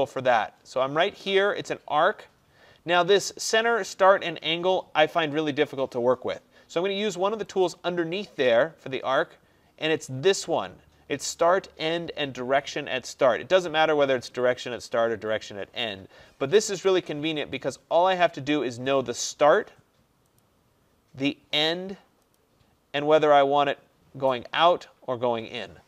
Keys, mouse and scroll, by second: 7.7 click, 17.8 click, 20.5 click.